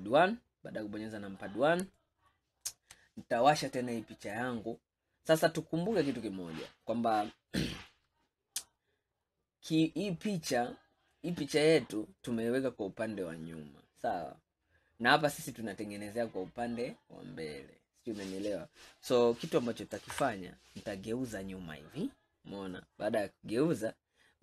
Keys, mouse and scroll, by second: 0.3 scroll down 4, 2.1-4.3 shift+middle drag, 4.3 click, 4.9 scroll up 2, 5.5 scroll down 2, 11.4-11.9 drag, 11.9-13.9 scroll up 4, 13.9-14.7 scroll down 2, 14.9-17.9 scroll down 2, 20.2 ctrl+KP_1, 21.6-22.0 scroll up 2, 22.3-23.5 scroll up 3, 24.2-24.4 scroll down 4.